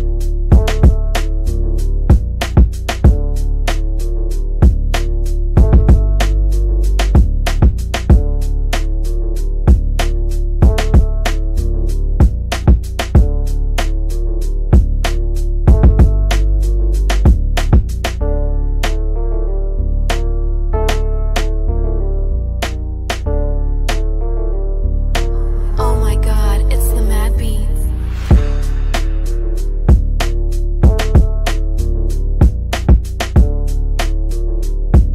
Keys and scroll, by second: 11.0 g.